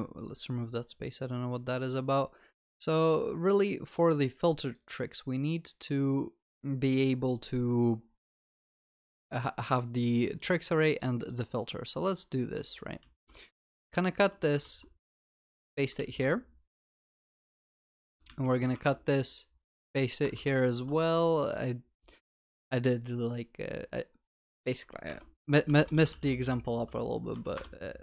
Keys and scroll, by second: 13.0 ctrl+x, 16.1 ctrl+s, 18.7 ctrl+x, 19.7 ctrl+z, 20.4 ctrl+v, 25.2 Tab, 27.5 Return.